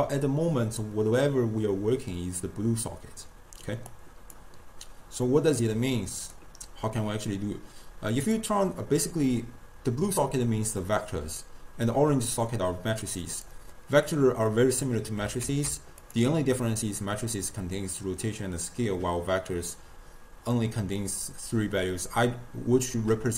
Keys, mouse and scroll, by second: 3.9-5.3 drag, 5.3-6.0 middle drag, 6.0 click, 8.7 click, 13.1 click, 15.5 ctrl+a.